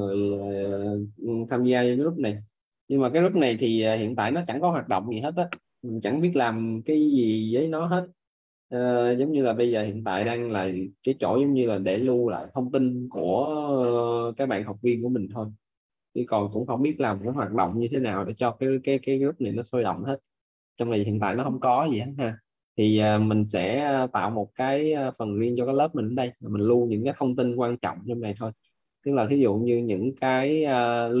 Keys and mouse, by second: 28.0 click.